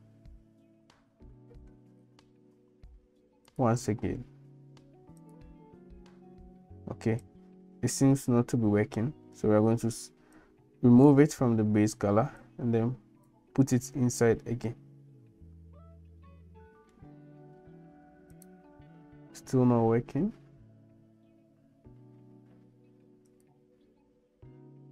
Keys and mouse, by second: 7.2 click, 10.4 click, 12.4 click, 18.5-23.6 drag.